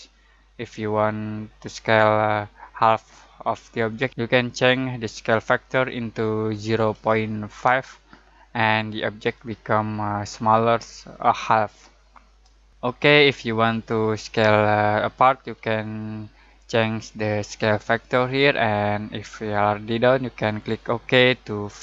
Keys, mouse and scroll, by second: 4.1-6.6 drag, 4.1 typing, 6.6-7.6 typing, 10.2-11.0 typing, 20.8-21.8 drag, 21.7 typing.